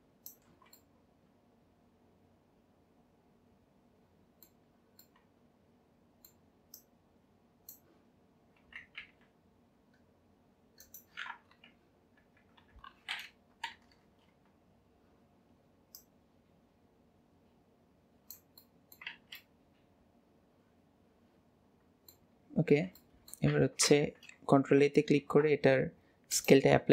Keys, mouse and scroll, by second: 0.5 alt+z, 0.8-3.8 middle drag, 5.1-6.8 middle drag, 6.8 click, 11.0-12.2 right drag, 12.2 KP_1, 13.2-14.0 scroll up 1, 14.0 alt+z, 16.0 click, 18.7-19.2 middle drag, 19.2 alt+z, 19.4-20.7 middle drag, 21.2-22.5 middle drag, 22.5-22.9 scroll down 1, 23.0-23.6 shift+middle drag, 23.6 Tab, 23.9 Tab, 25.1 ctrl+a.